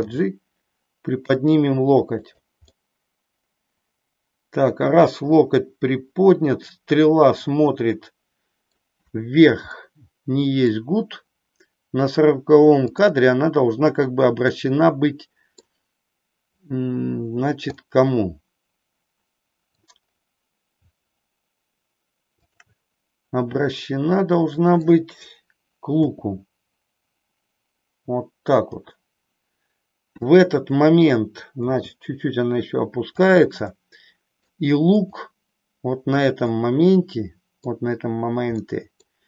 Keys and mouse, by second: 0.1 g, 2.3 click, 2.7-8.7 middle drag, 9.7-10.7 middle drag, 14.5-15.6 middle drag, 17.7-19.9 middle drag, 22.3 shift+click, 23.5-24.9 middle drag, 26.0 r, 31.7 g, 33.3 click, 33.7 middle click, 35.0-36.0 drag, 36.6-37.7 middle drag, 38.5 middle click.